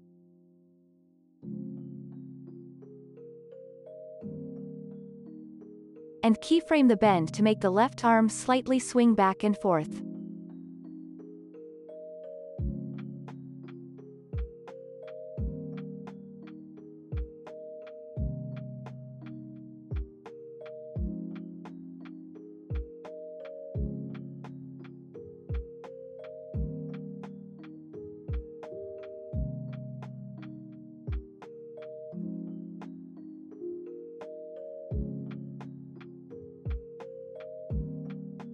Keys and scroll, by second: 4.1 ctrl+s, 8.7 u, 9.3 ctrl+s, 16.5 3, 16.7 Return, 18.5 KP_Subtract, 18.7 3, 18.8 Return, 21.4 F9, 22.3 space, 27.7 space, 30.3 space, 30.6 ctrl+s.